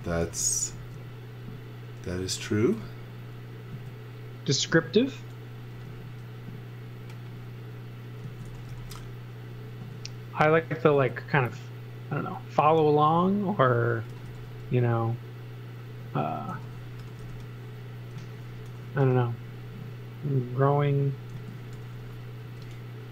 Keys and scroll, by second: 0.2 x, 0.8 space, 2.2 s, 5.8 m, 8.0-9.8 typing, 13.8-14.8 typing, 16.3-19.5 typing, 21.3 z, 21.7 x, 22.4 space.